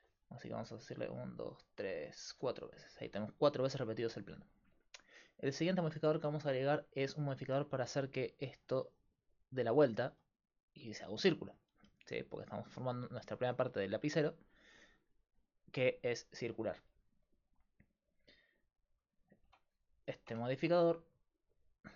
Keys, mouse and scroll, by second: 0.9-4.7 drag, 8.5-10.2 d, 8.7-11.9 drag, 11.9 d, 16.3 d, 19.5 click, 19.5 d, 19.5 Tab, 19.7-20.7 drag, 20.3 Tab, 21.4-21.9 drag.